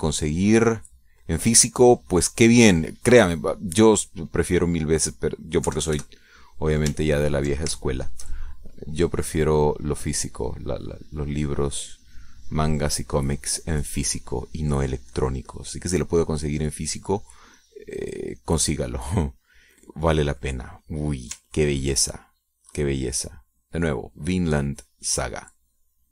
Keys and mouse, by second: 3.3 click, 5.9 middle click, 6.6 middle click, 7.1 KP_Add, 8.6 ctrl+click, 9.2 ctrl+shift+click, 9.9-21.3 shift+drag, 21.9 middle click, 23.1 ctrl+click, 23.6-26.1 ctrl+drag.